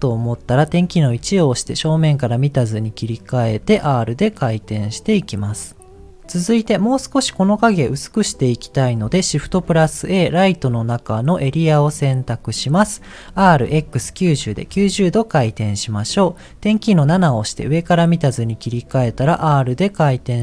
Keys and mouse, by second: 1.1 KP_1, 3.5 r, 13.3 r, 17.0 KP_7, 18.9 r.